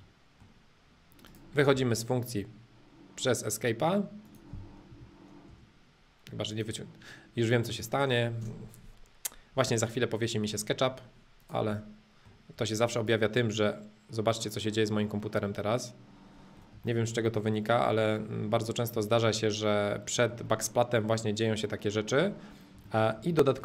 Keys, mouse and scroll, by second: 0.0-1.3 middle drag, 1.3 click, 1.7 space, 4.3 click, 4.9 Escape, 5.5 space, 6.5-8.4 drag, 8.4 space, 10.0 middle click, 11.4 click, 11.8-12.9 middle drag, 12.9 click, 13.4-15.4 middle drag, 17.0-19.6 shift+middle drag, 21.0-22.8 middle drag, 23.0 shift+middle click.